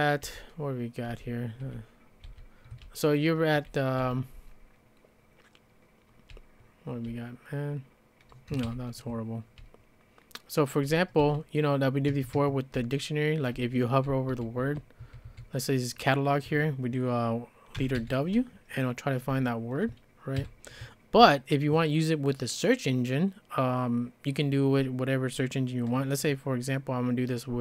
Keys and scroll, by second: 0.2-4.0 typing, 6.1-7.2 typing, 9.4-11.2 typing, 12.1 Tab, 12.4 Tab, 12.8-15.3 typing, 17.5-18.5 typing, 20.5 shift+b.